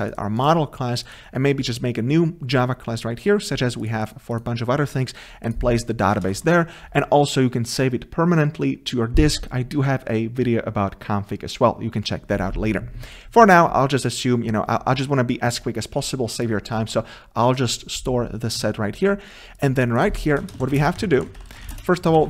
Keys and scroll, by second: 6.4 ctrl+v, 16.9 ctrl+c.